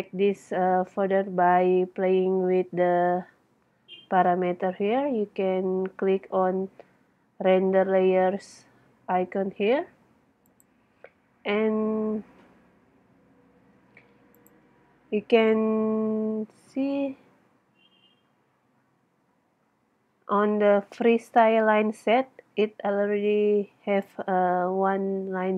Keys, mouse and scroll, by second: 2.0 click, 2.8 click, 10.6-12.4 middle drag, 14.6-15.9 middle drag, 22.5-23.6 middle drag, 24.2 middle click.